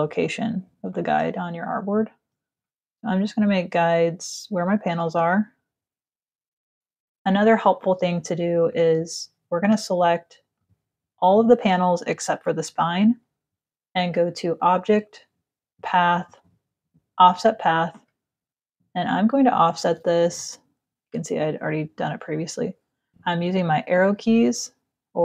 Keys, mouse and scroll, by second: 0.7 alt+click, 4.9 click, 8.3 click, 9.2 shift+click, 10.1 shift+click, 10.8 shift+click, 14.1 click, 16.6 click, 18.6 click, 20.0 Up, 21.0 Up, 21.3 Down, 22.0 Down, 23.1 Up, 23.6 Up, 24.2 Down.